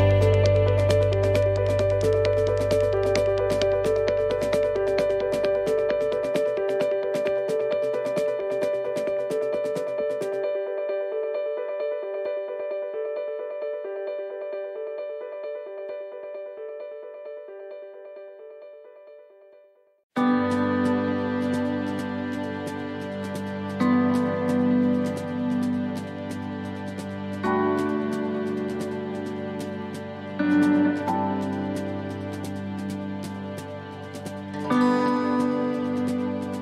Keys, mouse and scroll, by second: 0.6 click, 1.0 click, 2.3 click, 3.0 middle click, 5.8 middle click, 6.9 middle click, 8.3 click, 10.3 click, 11.8 middle click, 16.4 scroll down 1, 17.8 shift+d, 19.3 r, 22.9 middle click, 25.4 click, 27.1 middle click, 29.7 ctrl+z, 30.3 ctrl+z, 31.2 middle click, 32.9 r.